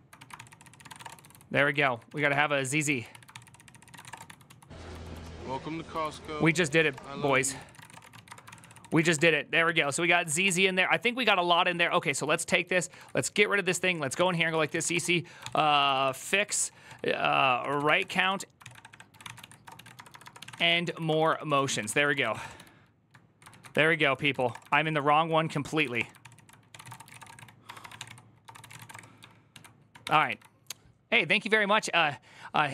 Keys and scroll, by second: 0.0-29.8 typing, 0.1 ctrl+c, 0.2 ctrl+c, 7.2 ctrl+c, 8.6 ctrl+c, 8.9 Return, 9.7 ctrl+c, 23.3 ctrl+a, 24.6 ctrl+c, 29.3 ctrl+a.